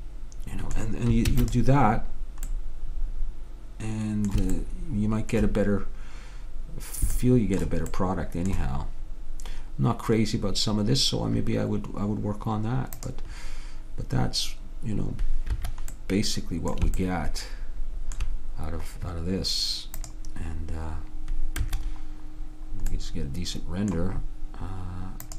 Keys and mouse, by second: 1.4 ctrl+s, 4.6-6.7 middle drag, 7.3 middle click, 13.1 click, 15.6 Escape, 20.1 click, 21.7 Escape, 25.3 click.